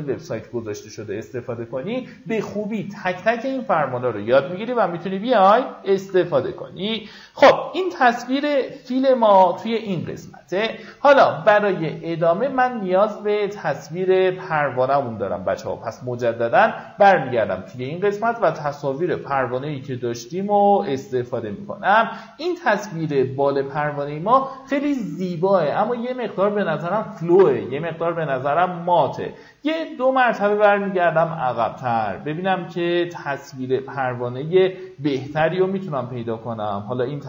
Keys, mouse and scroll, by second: 4.7 alt+scroll up 1, 6.0-7.5 drag, 7.7 alt+scroll up 1, 10.5-10.9 alt+scroll down 1, 13.7 Tab, 15.6 click, 16.8 click, 32.0 scroll down 1.